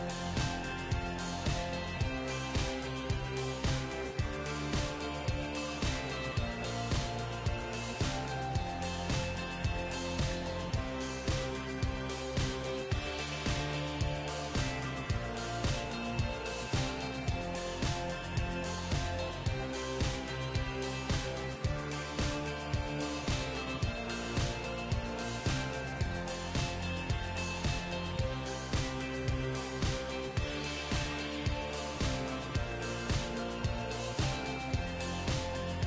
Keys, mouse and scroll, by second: 0.4 middle click, 0.4-2.9 right drag, 1.9 g, 2.9 middle click, 4.2-6.0 right drag, 4.7 g, 6.6-8.2 right drag, 6.7 g, 8.5-11.3 right drag, 8.7 g, 9.7 g, 10.6-12.8 middle drag, 11.3 g, 12.5-16.2 right drag, 12.7 g, 15.4 KP_3, 16.8-18.3 middle drag, 17.2 g, 18.5-22.2 right drag, 19.1 g, 21.0 g, 22.2-24.1 middle drag, 23.1-25.4 right drag, 23.1 g, 23.8 g, 26.3-32.2 middle drag, 27.5-29.7 right drag, 28.7-30.6 drag, 30.8 g, 33.1-34.9 right drag, 33.6-35.5 drag, 34.9 g.